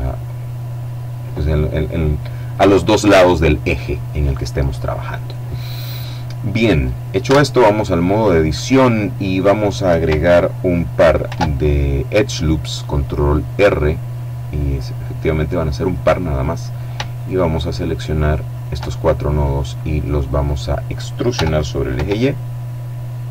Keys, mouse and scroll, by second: 5.9 click, 6.6 Tab, 7.3-9.0 drag, 10.6 ctrl+r, 13.0-13.5 scroll up 1, 13.9 click, 14.5-15.7 middle drag, 15.9 right click, 17.4 right click, 18.8-19.8 middle drag, 20.6 e, 21.2 y.